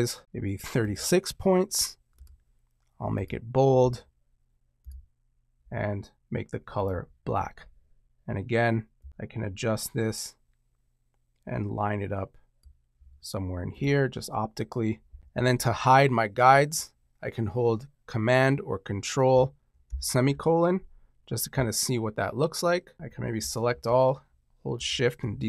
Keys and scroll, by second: 19.8 super+;.